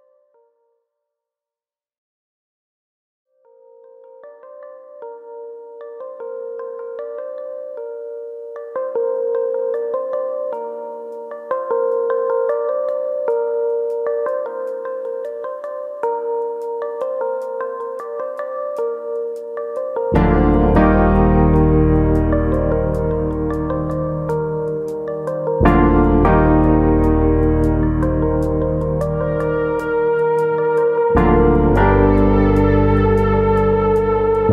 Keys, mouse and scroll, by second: 0.7 click, 1.4 shift+middle click, 2.5 s, 4.4 click, 5.6 click, 8.6 e, 9.5 click, 9.6 s, 11.4 click, 13.4 e, 14.9 click, 15.1 s, 15.9 click, 19.4 e, 21.0 click, 21.2 s, 22.3 click, 22.5 middle click, 23.0 shift+middle click, 23.4 middle click, 24.1 x, 26.5 middle click, 27.1 alt+click, 27.5 right click, 28.9 alt+click, 29.3 right click, 30.3 middle click, 30.9 alt+click, 31.2 right click, 32.4 alt+click, 32.7 right click, 33.7 middle click, 34.2 alt+click.